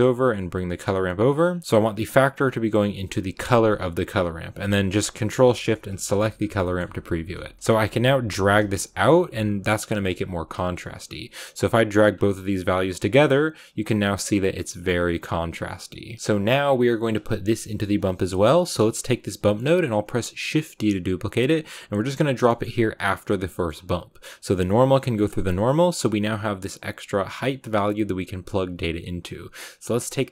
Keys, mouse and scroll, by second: 1.4-5.5 drag, 6.3 click, 7.8-16.1 drag, 16.1-18.3 scroll up 3, 18.3 scroll up 1, 18.4-20.3 drag, 20.3 shift+d, 22.4-25.4 middle drag, 25.4-27.6 drag, 29.5-30.3 drag.